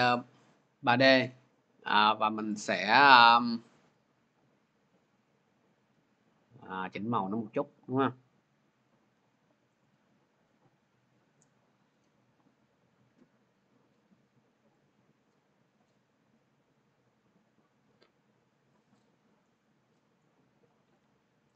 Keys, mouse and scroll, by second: 2.4 click, 7.3 click, 8.7 click, 9.7 click, 14.6 click, 16.6 click, 19.7 click.